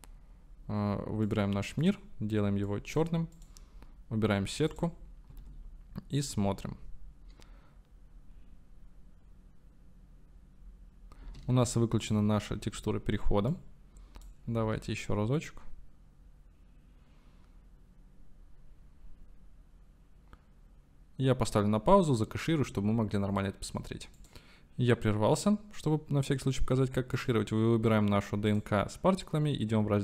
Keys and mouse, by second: 1.3 middle drag, 1.9 middle click, 3.4 middle click, 4.7 click, 5.3 space, 11.5 space, 12.1 click, 13.6-14.4 drag, 14.6 space, 27.3-28.7 drag.